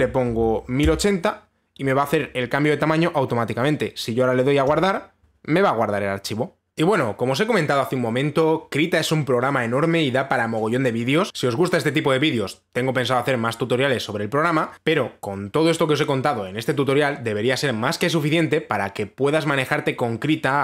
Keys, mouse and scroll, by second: 0.2-1.5 typing, 5.3 click.